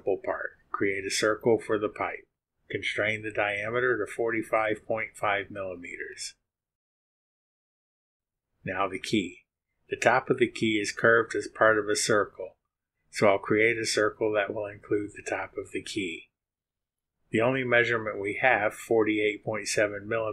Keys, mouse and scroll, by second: 0.3 click, 1.3 click, 1.7 click, 2.0 right click, 3.3 click, 3.8 click, 5.0 click, 5.8 KP_4, 5.9 KP_5, 6.3 KP_5, 7.4 click.